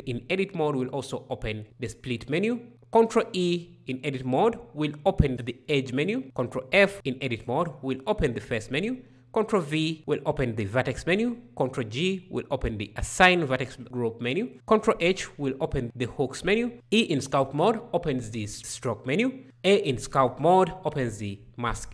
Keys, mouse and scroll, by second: 2.7 ctrl+e, 6.2 ctrl+f, 9.2 ctrl+v, 11.5 ctrl+g, 14.5 ctrl+h, 16.7 e, 19.4 a.